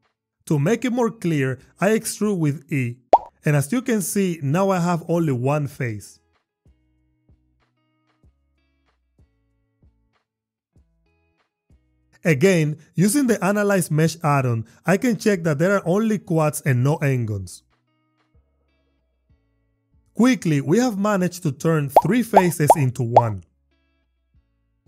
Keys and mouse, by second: 0.4 e, 1.8 y, 4.6 click, 6.6 Tab, 9.2 ctrl+r, 11.4 click, 12.4 click.